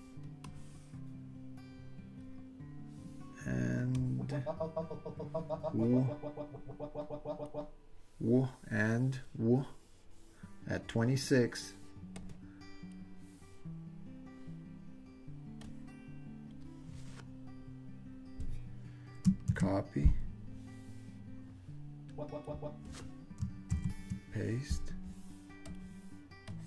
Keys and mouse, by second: 0.5-2.2 drag, 4.1-7.6 drag, 12.3 click, 15.7-18.2 drag, 19.5 super+c, 22.2 click, 23.7 super+v, 25.7 click, 26.5-26.6 drag.